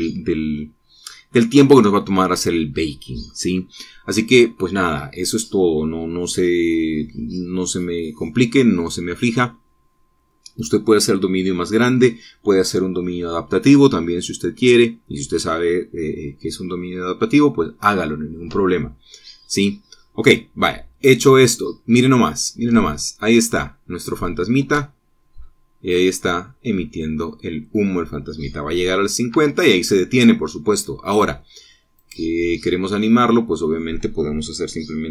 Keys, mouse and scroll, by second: 22.6-23.6 drag, 22.6-23.6 right drag, 23.6 middle click, 24.0-26.0 drag, 24.1 middle click, 25.7 space, 30.4 Escape, 31.2-32.5 drag, 32.5 middle click, 33.0 click, 33.9-35.1 drag.